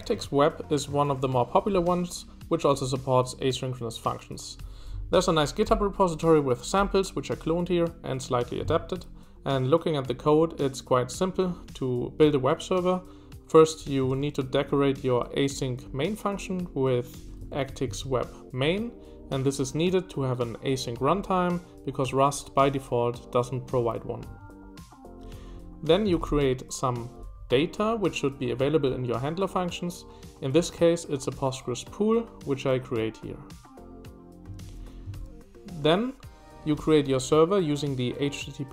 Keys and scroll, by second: 0.0 shift+v, 1.0 shift+v, 17.4 Escape, 17.4-18.4 typing, 24.2 Escape, 25.2-26.2 typing, 34.4-35.6 typing.